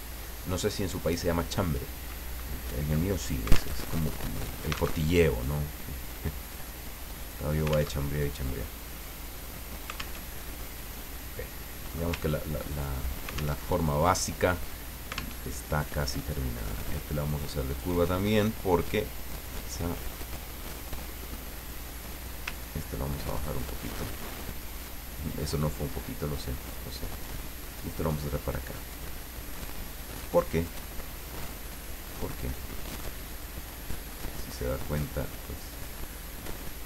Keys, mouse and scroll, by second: 3.8 alt+Tab, 5.0 alt+Tab, 7.2 click, 7.9 alt+Tab, 10.1 alt+Tab, 11.1-12.1 middle drag, 12.2-12.5 ctrl+scroll up 2, 13.6 alt+Tab, 15.4 alt+Tab, 16.6 click, 17.7 click, 19.4 click, 21.6 click, 22.5-24.5 ctrl+drag, 25.1-26.7 drag, 27.7-29.9 drag, 30.6-32.0 drag, 32.7 click, 34.7-36.0 drag.